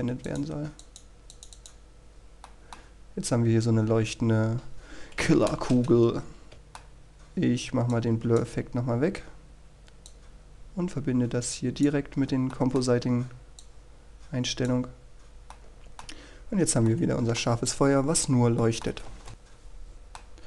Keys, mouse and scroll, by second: 3.6 middle click, 4.2-5.6 scroll down 1, 5.6-6.5 scroll up 1, 6.7 middle click, 6.8-7.3 scroll down 1, 7.3 scroll up 1, 7.6-8.7 middle drag, 9.1-13.7 drag, 13.7-14.7 middle drag, 15.7-16.7 drag, 16.7 middle click, 17.5-18.0 scroll up 1, 18.0 shift+middle click, 19.0-19.3 scroll down 1, 19.3 shift+space, 19.4-20.4 middle drag.